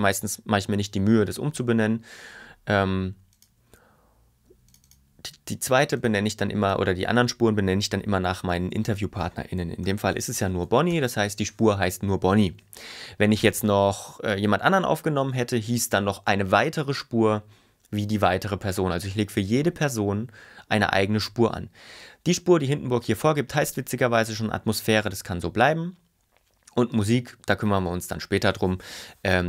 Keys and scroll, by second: 9.7-10.7 typing, 11.0 Return.